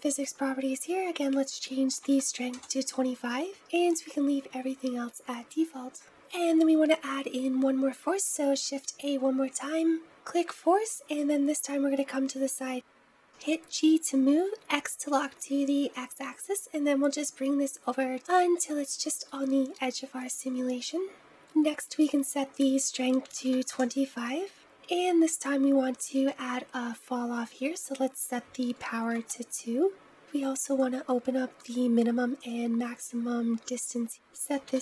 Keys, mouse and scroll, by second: 1.1-3.5 drag, 6.1-7.3 middle drag, 6.1-6.6 scroll down 1, 6.6-7.3 scroll down 1, 7.3 scroll up 1, 8.3 shift+a, 11.0-13.1 middle drag, 13.1 g, 19.6-21.3 shift+middle drag, 22.4-24.6 drag, 25.0-27.6 scroll down 4, 28.1-30.1 drag, 30.5 click, 31.8 click, 32.5 click, 34.1-34.8 drag.